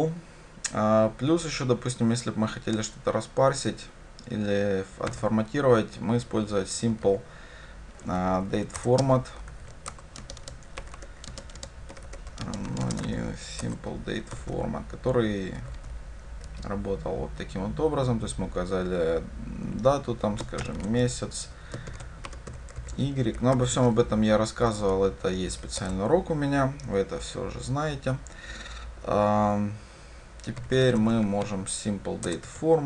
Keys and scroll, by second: 8.9 Return, 31.0 Tab, 32.4 Return.